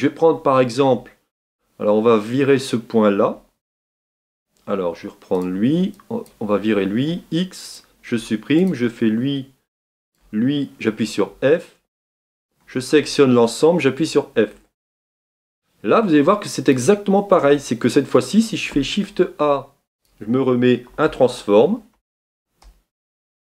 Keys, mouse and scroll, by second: 3.2 Tab, 3.9 click, 4.1 Tab, 5.4 click, 7.7 x, 8.7 click, 11.0 f, 12.6 a, 13.0 a, 14.5 f, 14.9 Tab, 15.6-15.9 scroll down 1, 16.8-23.4 drag.